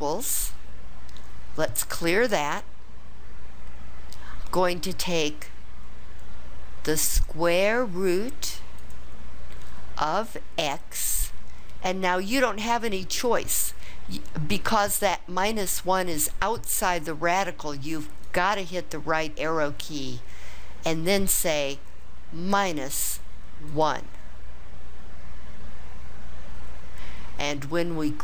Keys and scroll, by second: 18.2 ), 22.5 -, 23.7 1.